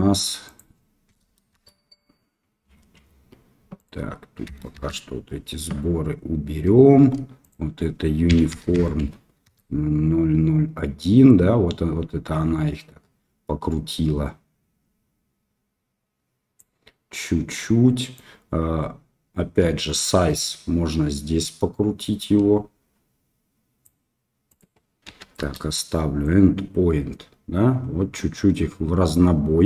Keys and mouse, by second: 0.4-1.8 drag, 3.7-5.0 drag, 7.4-10.2 drag, 11.2-16.5 drag, 18.1-24.2 drag, 24.6 click, 26.3-29.6 drag.